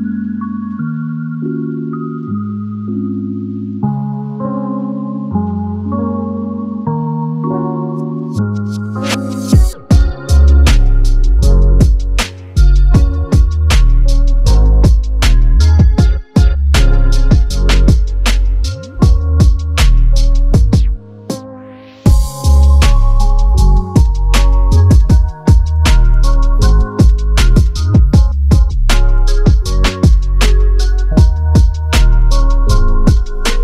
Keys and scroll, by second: 0.5 ctrl+z, 30.2 ctrl+KP_Subtract, 30.3 ctrl+KP_Subtract, 30.4 ctrl+KP_Subtract, 30.5 ctrl+KP_Subtract, 31.8 KP_Add, 31.9 KP_Add.